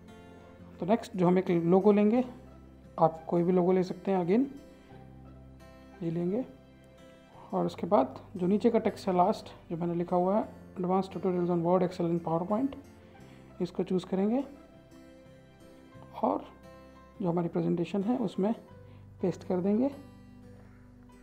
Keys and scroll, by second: 14.1 ctrl+c, 20.2 ctrl+v.